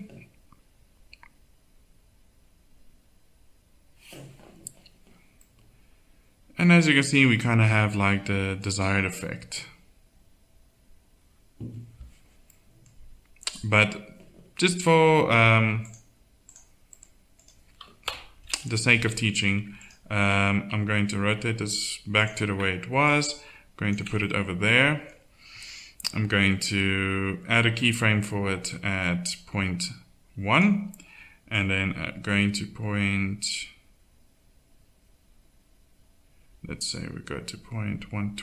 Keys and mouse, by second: 6.1-7.1 middle drag, 16.9 click, 17.4 middle click, 18.0 KP_7, 18.2 middle click, 18.9 g, 20.2 r, 24.3-33.5 drag.